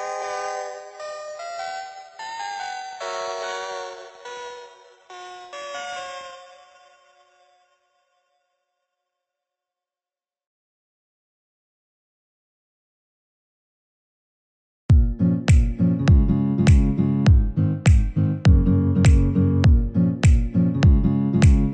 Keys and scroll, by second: 1.0 ctrl+z, 7.7 ctrl+=, 13.7 Delete, 19.3 Delete.